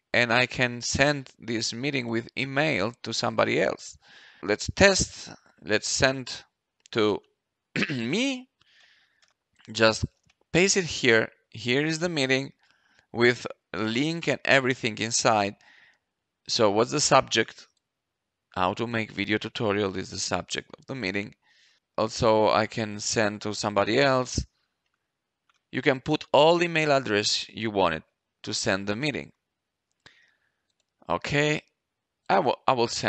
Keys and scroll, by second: 7.6-9.2 typing, 10.1 ctrl+v, 19.4 ctrl+c, 20.0 ctrl+v.